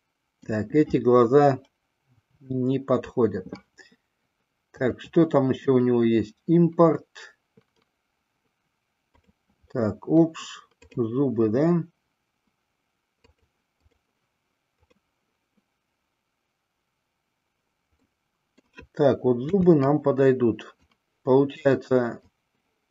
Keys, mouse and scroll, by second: 2.3 Delete, 4.8-9.7 drag, 18.2-18.8 middle drag, 19.4 KP_3, 20.9-22.4 drag.